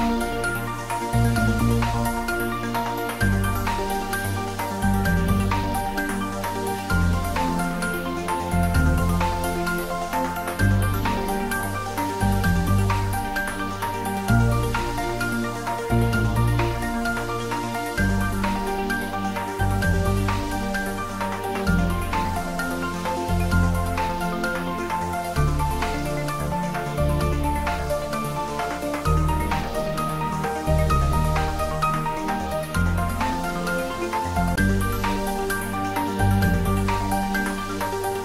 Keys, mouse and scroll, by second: 4.9-5.5 scroll down 1, 5.5 click, 6.0-7.2 scroll up 1, 7.2 click, 8.7-11.0 scroll down 1, 14.5 click, 16.8-17.4 scroll down 1, 18.8 click, 19.2 scroll down 1, 19.5-22.1 middle drag, 22.2-23.6 scroll down 1, 24.7-25.2 scroll down 1, 25.2-26.1 middle click, 26.2-27.5 scroll up 1, 27.5 click, 28.7 Tab, 29.1 click, 30.5 i, 32.5 click, 33.6 `, 34.0 3, 35.5 g, 36.0 z, 37.6 click, 37.9-38.2 scroll down 1.